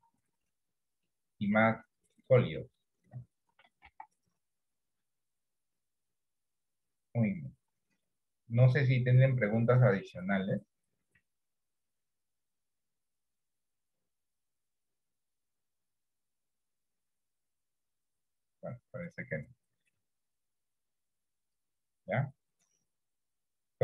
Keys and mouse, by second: 2.0 middle click, 3.9 KP_1, 4.0 KP_3, 6.2 click.